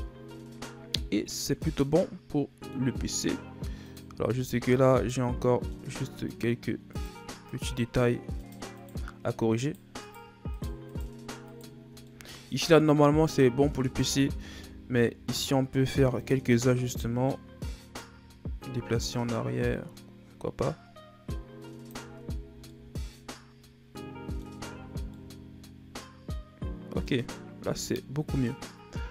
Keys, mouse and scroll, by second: 0.4-0.8 scroll up 3, 1.8-2.9 middle drag, 2.9-3.5 scroll up 3, 3.5-3.8 scroll up 1, 3.8 right click, 4.1 Tab, 4.5-5.0 shift+scroll up 2, 5.0 right click, 5.4 middle click, 6.3 shift+right click, 6.9 shift+right click, 7.5 shift+right click, 8.4 shift+right click, 8.8 shift+right click, 9.6 shift+right click, 10.0 shift+right click, 10.5 shift+right click, 10.8 shift+right click, 11.5 shift+right click, 11.9 scroll down 2, 12.1-13.8 middle drag, 13.8 s, 16.5 scroll up 1, 16.6-17.9 middle drag, 17.9 click, 22.2 Tab, 22.7-24.6 middle drag, 24.6 a, 24.8-25.1 scroll down 3, 25.1-27.2 middle drag, 27.2-27.9 scroll up 3, 28.4-29.0 scroll up 1.